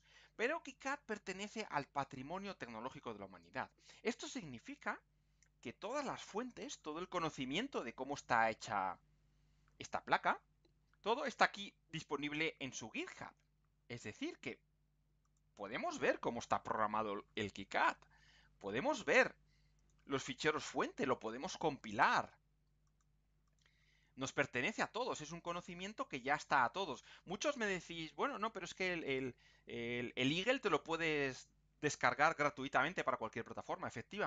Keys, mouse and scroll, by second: 9.1 scroll down 2, 10.1-10.5 scroll up 2, 11.1 click, 13.8-14.1 scroll down 2, 15.2 click, 18.0-18.8 scroll down 2, 19.7 click, 21.7-22.2 scroll down 2, 22.8 click, 23.5 click, 26.2-26.6 scroll down 2, 26.7-27.3 scroll down 2.